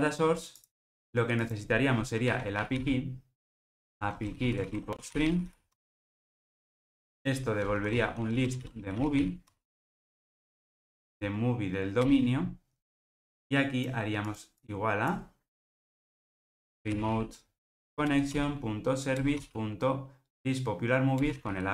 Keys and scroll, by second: 5.7 Escape, 9.5 Escape, 10.7 alt+Return, 18.2 Return.